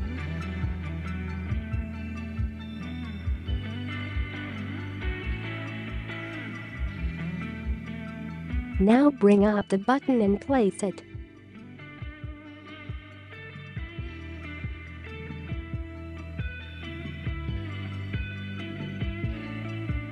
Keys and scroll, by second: 8.3 space, 8.6 space, 13.3 Down, 13.5 shift+Up, 13.7 shift+Up, 17.3 space, 17.6 space, 19.8 space.